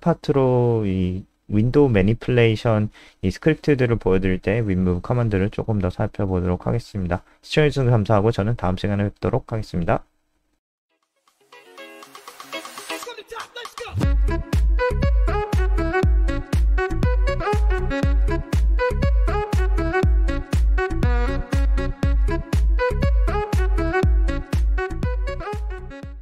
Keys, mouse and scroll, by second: 1.0 click, 1.4-1.9 scroll down 6, 2.5 click.